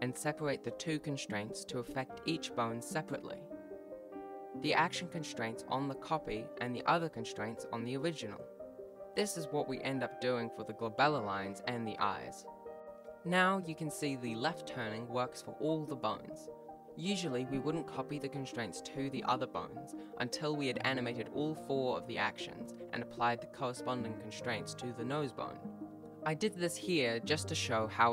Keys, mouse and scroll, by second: 0.0 scroll up 1, 0.2 right click, 0.3 right click, 0.4 right click, 0.5-1.0 scroll down 2, 0.6 g, 1.3 click, 1.5 click, 1.7 right click, 2.0 shift+right click, 2.1 shift+click, 2.2 shift+right click, 2.3 F3, 3.1 click, 3.5 right click, 4.0 g, 4.2 ctrl+s, 4.4 click, 4.5 click, 4.6 click, 4.9 click, 5.4 right click, 5.5 shift+right click, 5.9 shift+right click, 6.0 right click, 6.2 click, 6.3 click, 6.5 click, 6.8 click, 6.9 click, 7.5-7.9 click, 7.6 click, 7.7 click, 8.2 click, 8.4 click, 8.5 right click, 8.6 right click, 8.7 g, 9.5 ctrl+s, 9.5 click, 9.7 click, 9.8 click, 10.1 click, 10.4 click, 10.4 right click, 10.9 shift+right click, 11.1 shift+right click, 12.2 shift+click, 12.3 shift+right click, 12.7 F3, 12.8 right click, 12.9 g, 15.7 click, 16.7 g.